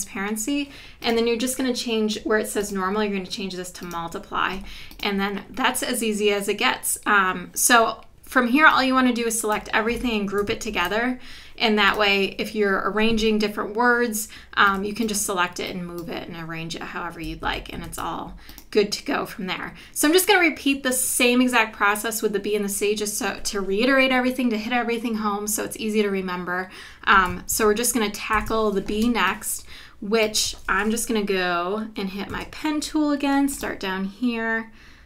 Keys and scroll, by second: 10.7 super+g, 17.4 super+z, 27.5 super+=, 28.3 super+=, 29.0 space, 32.3 p.